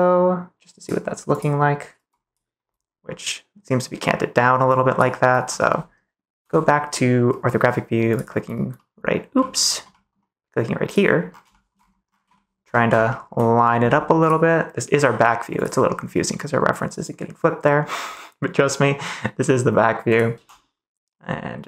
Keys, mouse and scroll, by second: 9.3 middle click, 9.8 middle click, 10.0 click, 10.8 click, 11.4 shift+middle click, 11.5 shift+click, 12.4 shift+middle click, 13.1 shift+middle click, 14.9 g, 20.3 g, 21.5 click.